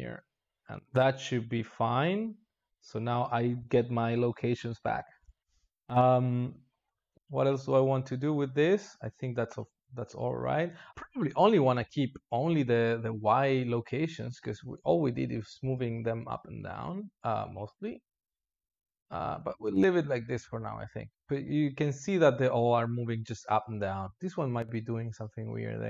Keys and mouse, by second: 0.0 x, 2.5 click, 18.7-19.3 drag, 19.3 space.